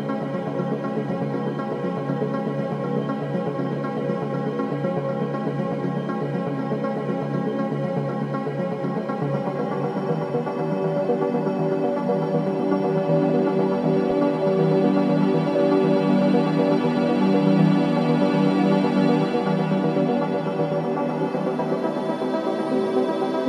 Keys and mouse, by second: 3.3 click, 4.5 click, 6.5 click, 10.6 alt+click, 12.0 alt+click, 12.8 click, 13.2 alt+click, 13.8 click, 15.3 typing, 19.8 click, 20.9 click.